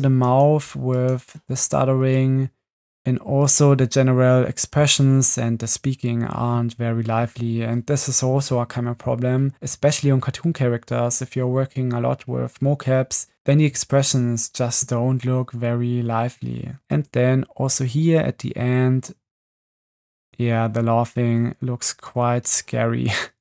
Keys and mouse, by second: 0.2 space, 1.6 space, 3.5 space, 16.9 space, 20.2 space, 22.1 click.